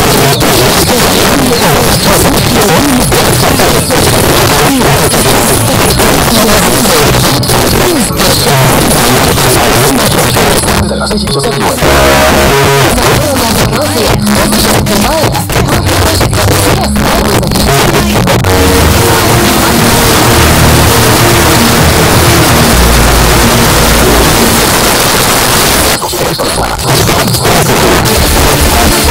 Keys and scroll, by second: 24.6 Page_Down.